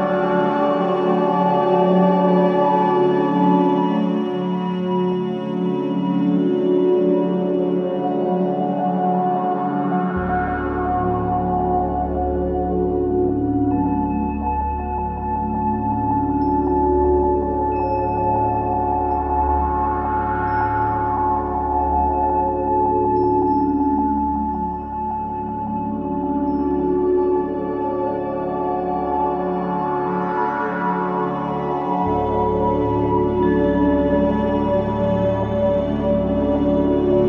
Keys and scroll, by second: 4.3 ctrl+z, 10.8 space, 17.7 space, 21.6 space, 33.2 space.